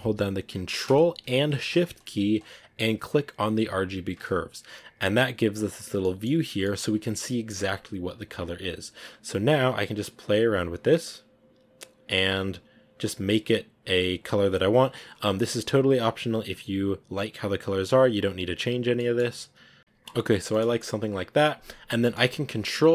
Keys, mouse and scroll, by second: 3.6 ctrl+shift+click, 5.9-7.6 middle drag, 7.6 scroll up 3, 8.3 scroll up 2, 8.7-18.0 drag, 18.0 scroll down 2, 18.6 scroll down 3, 18.9-20.9 middle drag, 20.9-21.9 scroll down 7.